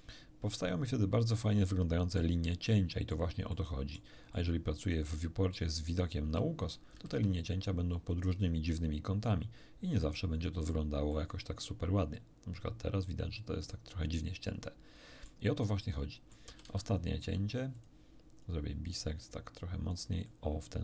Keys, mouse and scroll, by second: 3.1 middle click, 3.4 middle click, 4.3-5.7 middle drag, 6.9 a, 7.0 a, 8.2 click, 9.2-10.8 drag, 11.0-15.4 middle drag, 15.6 middle click, 16.4 a, 16.6 a, 17.7 click, 18.4-20.0 drag, 20.2-20.8 middle drag.